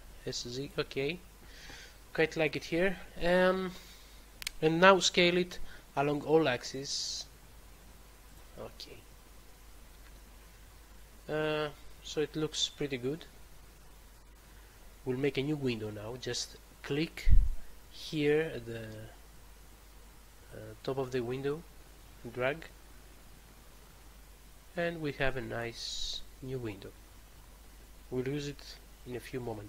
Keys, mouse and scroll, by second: 0.6 click, 1.8 middle click, 5.2 s, 8.2 click, 21.4 click.